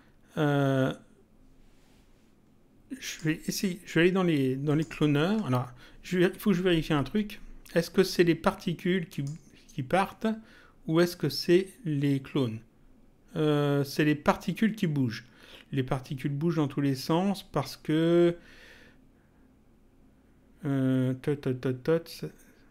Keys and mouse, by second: 3.0 click, 4.6 ctrl+click, 9.1 click.